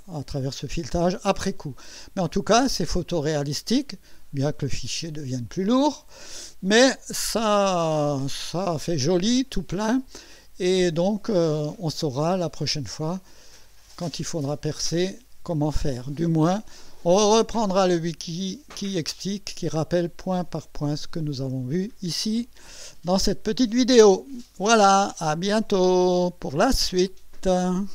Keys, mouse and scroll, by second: 1.5 scroll up 2, 2.1-3.9 drag, 6.8-8.4 drag, 8.7-10.3 drag, 10.7 scroll down 1, 11.3 right click, 12.9-15.7 drag, 18.2 click, 19.1 click, 21.0-22.2 right drag.